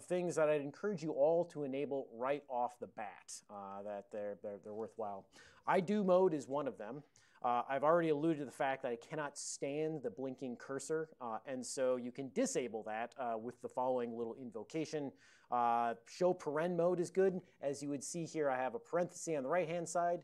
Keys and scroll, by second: 0.8 ctrl+a, 2.3 ctrl+p, 2.6 ctrl+p, 2.8 ctrl+p, 2.9 ctrl+p, 3.8 ctrl+l, 4.1 ctrl+l, 5.8 Down, 12.5-13.5 Right, 16.2 Left.